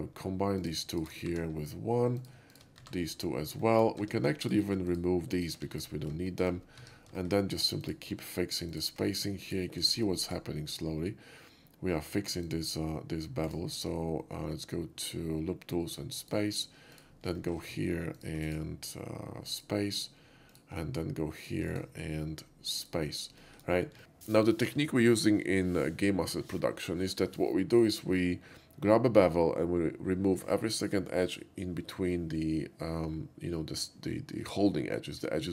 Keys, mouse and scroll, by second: 0.6 ctrl+click, 1.0 shift+click, 1.3 1, 2.2 click, 2.5 shift+click, 2.8 1, 3.6 shift+middle click, 4.0 Tab, 4.5 click, 4.9 click, 5.4 click, 5.6 x, 5.8 click, 6.3 shift+middle click, 6.8 Tab, 7.2 shift+middle click, 7.9 shift+click, 8.8 click, 9.5 ctrl+click, 9.9 shift+middle click, 10.3 shift+right click, 12.5 shift+click, 13.5-16.2 right drag, 16.2 click, 17.0 click, 17.4 shift+middle click, 18.2 ctrl+click, 18.5 ctrl+right click, 19.6 ctrl+click, 20.5 ctrl+click, 21.4-21.7 ctrl+drag, 21.7 ctrl+right click, 22.8 ctrl+click, 23.5 shift+middle click.